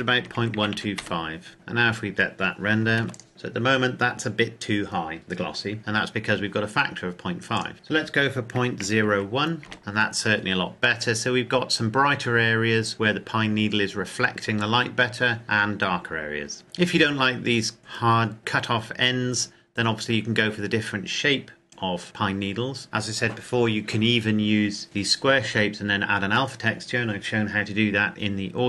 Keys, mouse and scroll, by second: 0.2 KP_Decimal, 0.4 KP_1, 0.5 KP_2, 0.7 KP_5, 1.0 KP_Enter, 2.7 KP_Enter, 2.8 ctrl+s, 3.1 click, 7.6 click, 8.6 KP_Decimal, 8.9 KP_0, 9.1 KP_1, 9.8 KP_Enter.